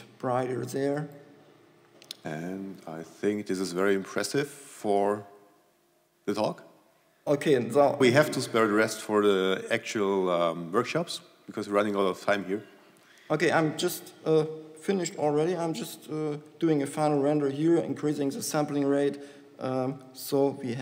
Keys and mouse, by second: 0.0 r, 2.4 r, 13.9 z, 17.1-19.0 drag, 20.7-20.8 drag.